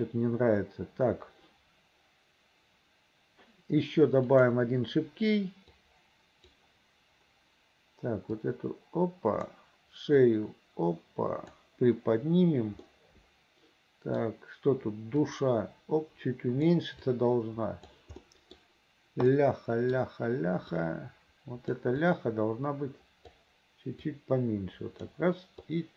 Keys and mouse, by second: 4.4 click, 5.9 click, 8.5-9.6 drag, 10.3-11.7 drag, 12.9-14.3 middle drag, 15.4-16.8 drag, 17.2 click, 18.3 middle click, 19.4 middle click, 20.9 click, 22.1-23.4 drag, 24.2-25.2 drag, 25.7 click.